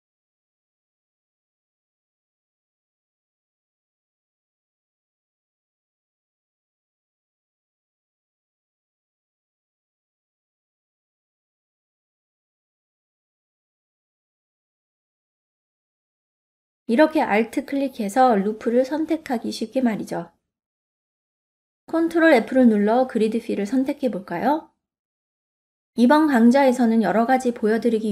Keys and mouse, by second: 0.5 middle click, 1.2 middle click, 2.1 click, 3.5 e, 4.6 click, 5.2 click, 5.6-7.0 drag, 7.9 click, 8.6 f, 9.2 middle click, 10.1 click, 10.5 click, 11.8 click, 12.7 click, 13.7 click, 15.2 middle click, 15.7 click, 17.0 middle click, 21.2 middle click, 22.7 ctrl+f, 24.3 click, 25.1 click, 26.5-28.1 middle drag.